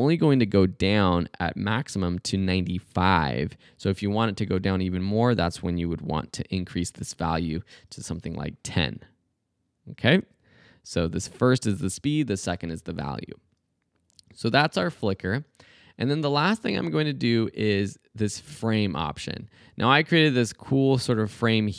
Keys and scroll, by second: 4.7 Right, 5.5-6.5 typing, 8.1 space, 12.5 space, 15.3 space, 16.6 space.